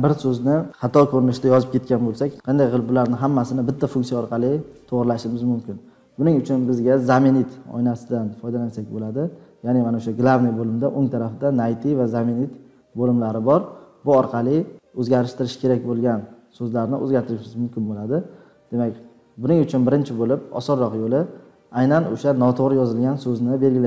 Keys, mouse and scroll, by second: 19.4 click, 19.4 scroll, 20.2 scroll.